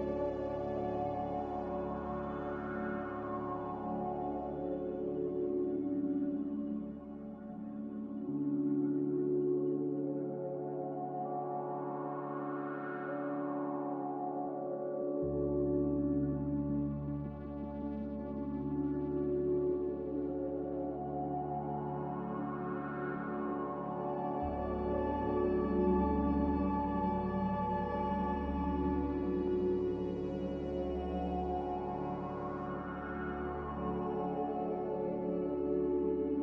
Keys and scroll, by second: 21.2-23.2 typing, 23.6 Return, 33.6 ctrl+z.